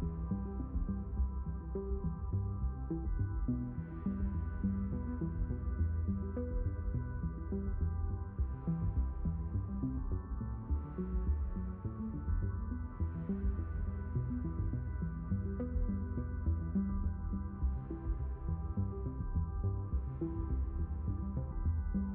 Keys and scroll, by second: 2.7 ctrl+z.